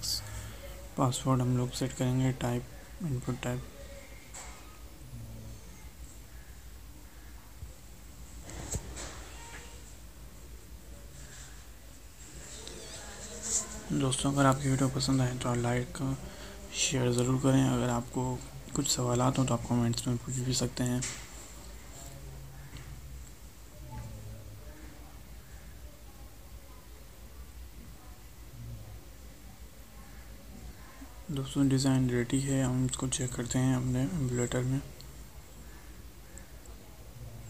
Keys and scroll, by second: 3.5 ctrl+v, 15.2 ctrl+shift+Right, 16.6 ctrl+c, 17.7 ctrl+v, 33.4 alt+Tab.